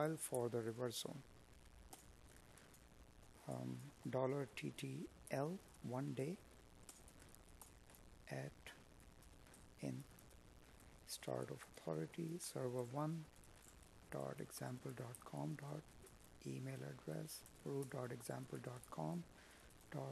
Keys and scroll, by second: 2.1 space, 3.5 Tab, 11.9 space, 16.0 space, 17.7 Tab.